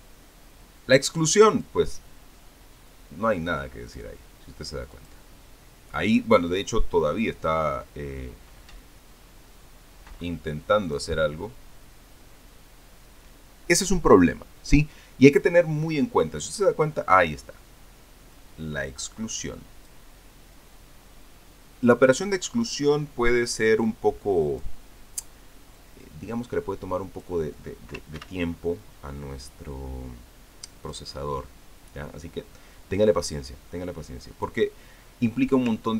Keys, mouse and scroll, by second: 2.3 click, 4.7 click, 5.7 click, 11.7 click, 19.1-20.8 drag, 23.4-25.6 drag, 26.6-28.4 drag, 28.4 middle click, 29.0 ctrl+d, 29.6-31.9 ctrl+drag.